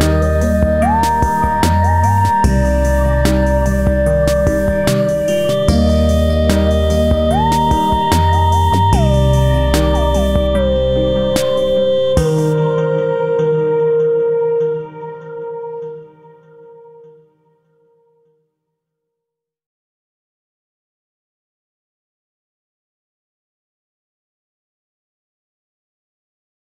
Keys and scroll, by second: 13.4 Down, 15.7 Left, 16.0 Down, 16.5 Left, 17.0 Down, 17.3 Left, 17.6 Down, 18.1 Up, 18.3 Down, 18.6 Up, 18.8 Right.